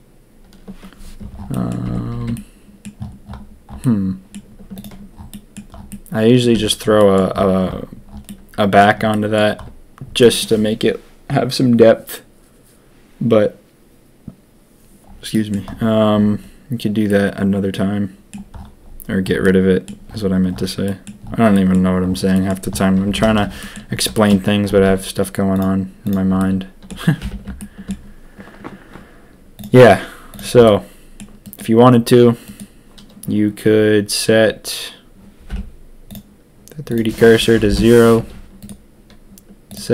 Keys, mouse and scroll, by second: 1.5 click, 1.8 Tab, 2.0 a, 2.1 a, 2.3-2.8 drag, 3.8 click, 4.8 click, 5.4 click, 5.8 click, 6.5 Tab, 6.9 click, 8.2 click, 8.6 click, 9.1 click, 10.2 middle click, 15.3 middle click, 17.0-18.3 middle drag, 19.4 middle click, 20.8 middle click, 21.5 middle click, 22.3 click, 23.0 Tab, 23.2 a, 23.3 a, 23.6 click, 24.1 shift+drag, 24.8 ctrl+s, 25.6 click, 26.3-26.9 shift+drag, 27.2 n, 27.5-27.8 shift+drag, 30.3 click, 30.6-31.1 drag, 32.4 click, 35.5 n.